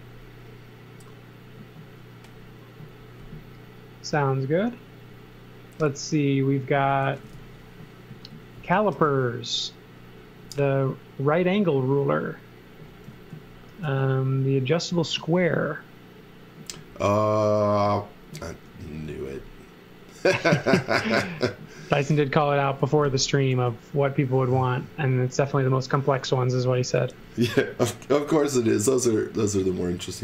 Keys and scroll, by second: 6.8-8.9 typing, 13.0 z, 13.8 x, 15.1 z, 18.6 x, 19.0 z, 20.3 x, 22.0 x, 23.5 l, 26.1 x, 26.9 z, 28.2 l.